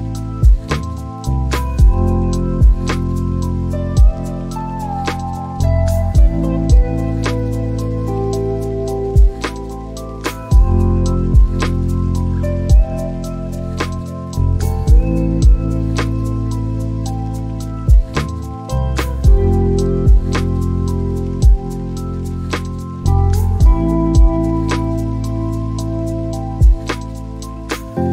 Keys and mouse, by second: 6.2 g, 7.0 x, 9.1 click, 21.6 click, 25.0 click, 25.9 click.